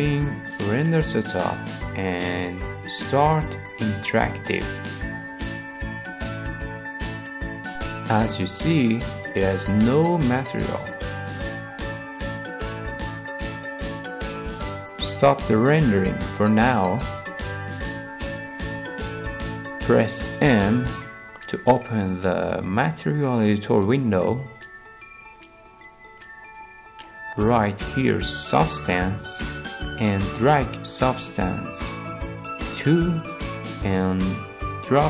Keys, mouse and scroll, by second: 0.4-1.5 drag, 3.5-4.6 drag, 16.2-17.2 drag, 18.3 click, 19.9 click, 25.0 click, 25.6 click, 27.7-29.5 drag, 29.4-30.9 typing, 34.2-35.0 drag.